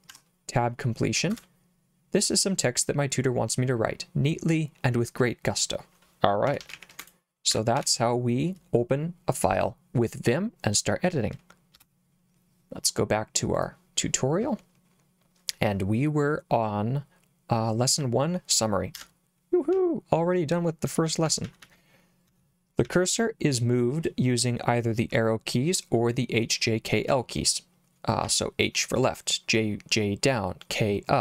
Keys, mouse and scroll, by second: 0.1 Tab, 1.3 Return, 6.2-7.8 typing, 11.8 Return, 13.5 click, 19.7 j, 20.8-22.8 typing, 27.1 k, 28.2 k.